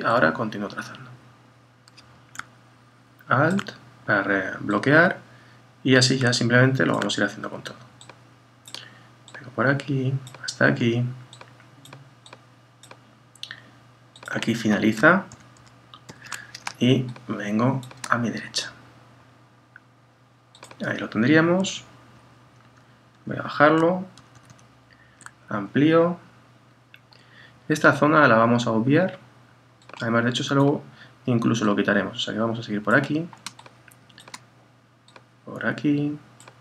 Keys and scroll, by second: 15.3 super+-, 22.1 Down, 24.2 super++.